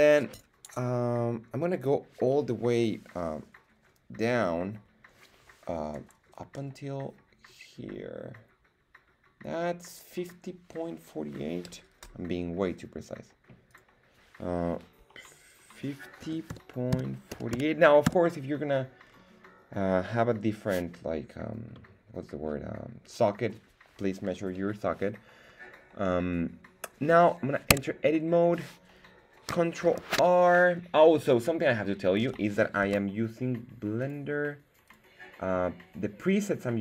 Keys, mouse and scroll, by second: 13.7-18.0 drag, 18.0 middle click, 19.0-21.7 scroll down 2, 21.7-22.4 middle drag, 27.8 Tab, 30.0 ctrl+r, 32.1 Escape, 32.8 Tab, 34.0-35.5 drag.